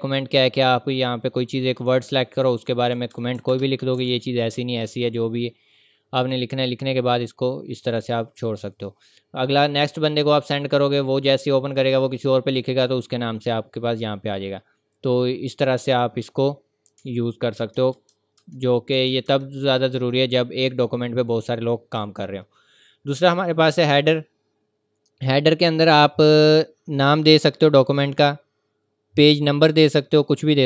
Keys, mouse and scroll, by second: 2.7-4.0 typing, 2.7 click, 6.2 click, 6.9-7.3 scroll up 1, 7.3 scroll down 1, 7.7-8.9 scroll up 1, 8.9-9.8 scroll down 1, 9.8 click, 10.3-11.1 scroll up 1, 11.7-12.7 scroll down 1, 12.7-14.5 scroll up 1, 15.6 click, 20.0-20.5 scroll up 1, 23.3 click, 25.7 click, 25.7 scroll down 1, 29.6 scroll down 1, 30.2-30.6 scroll up 1.